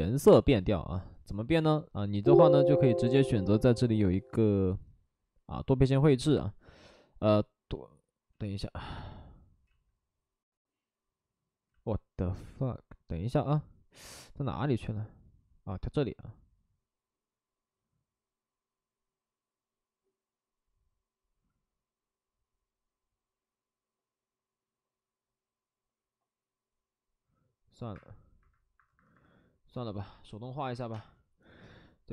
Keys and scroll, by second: 8.3 ctrl+z, 9.6 ctrl+z, 11.6 ctrl+z, 27.9 Escape, 28.3 Escape, 28.7 Escape, 28.9 Escape, 29.1 Escape, 30.9 space.